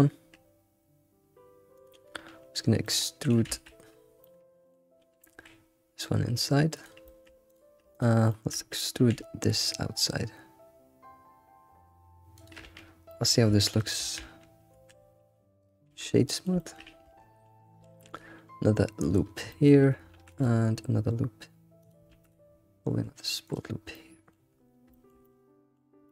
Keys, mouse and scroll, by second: 2.8 middle click, 3.6 alt+z, 4.0 scroll down 1, 4.2 middle click, 4.8 scroll up 2, 5.3 e, 7.0 shift+middle click, 7.5 click, 7.9 shift+click, 8.3 shift+middle click, 9.0 e, 12.6 Tab, 12.9 scroll down 2, 13.1-14.0 middle drag, 14.0 ctrl+1, 14.7 ctrl+2, 15.9-16.3 right drag, 16.3-17.1 middle drag, 17.1 Tab, 17.4-17.8 scroll up 2, 17.8 ctrl+r, 19.5-20.1 shift+middle drag, 22.1 ctrl+r, 23.7 scroll down 2, 23.9 middle click, 24.5-24.9 scroll up 4, 24.9-26.1 shift+middle drag.